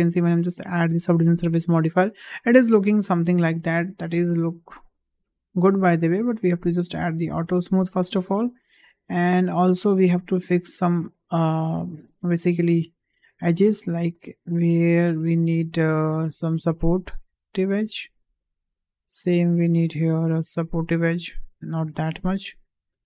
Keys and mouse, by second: 0.3-0.7 shift+middle drag, 1.7 shift+h, 2.6-3.9 middle drag, 4.9 shift+middle drag, 5.7-7.4 right drag, 8.1 `, 9.3 shift+middle drag, 9.8 click, 10.0 Tab, 13.0 click, 14.2-16.5 drag, 17.2 click, 19.0-21.8 drag, 22.4-23.0 drag.